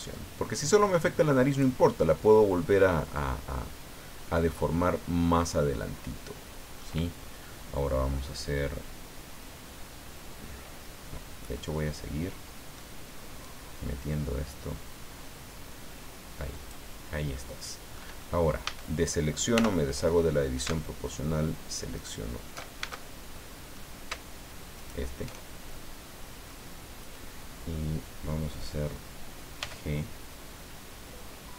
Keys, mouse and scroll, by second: 1.9-4.7 middle drag, 4.9-5.3 scroll up 1, 5.6 scroll down 1, 6.1 middle click, 11.4-12.9 middle drag, 13.4-15.0 drag, 15.0-15.4 scroll up 1, 17.4 click, 18.6 a, 19.5 o, 21.9 alt+shift+right click, 22.8 alt+shift+a, 23.3 alt+shift+click, 23.4 middle click, 24.7 alt+shift+right click, 25.8 middle click, 29.6 g.